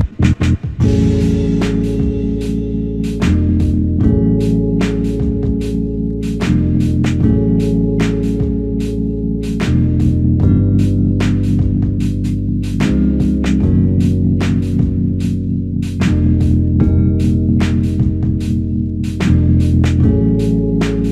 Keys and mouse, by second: 8.0 alt+click, 10.8 ctrl+click, 12.1 ctrl+click, 16.6 ctrl+click, 20.2 ctrl+click.